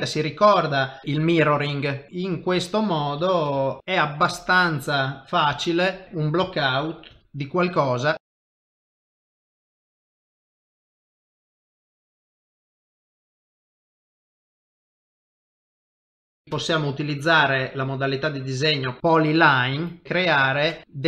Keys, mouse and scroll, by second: 1.0 g, 1.4 middle click, 2.1 ctrl+shift+v, 2.1 click, 3.5 ctrl+shift+v, 6.0 middle click, 6.0 click, 7.1 ctrl+shift+v, 7.2 middle click, 8.2 click, 8.3 shift+middle click, 8.7 shift+v, 8.8 middle click, 9.3 click, 10.3 shift+v, 10.5 middle click, 11.0 r, 11.3 middle click, 11.8 ctrl+shift+v, 12.3 g, 12.7 middle click, 12.9 shift+middle click, 13.0 middle click, 13.5 r, 14.0 g, 14.3 ctrl+middle click, 14.5 middle click, 15.4 KP_3, 16.2 shift+v, 17.4 click, 19.7 click.